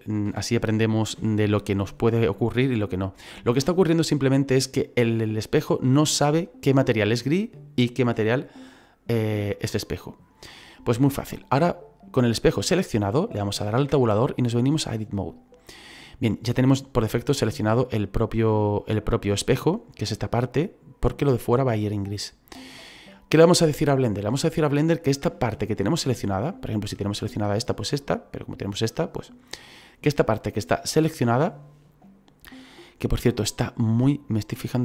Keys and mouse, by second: 13.8 Tab, 14.8 click, 26.8 right click, 28.4 right click.